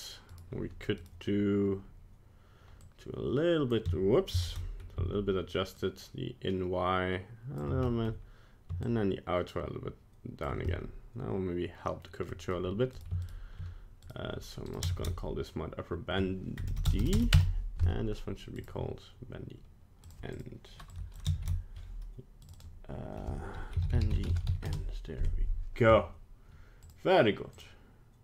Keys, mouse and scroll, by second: 0.3 right click, 1.0 right click, 2.8 click, 4.4 ctrl+z, 5.8 shift+click, 7.8 middle click, 8.8 shift+click, 10.7 middle click, 12.3 middle click, 12.9 right click, 13.2 shift+right click, 14.0 right click, 14.7 click, 16.9 BackSpace, 17.0 BackSpace, 18.6 right click, 20.0 click.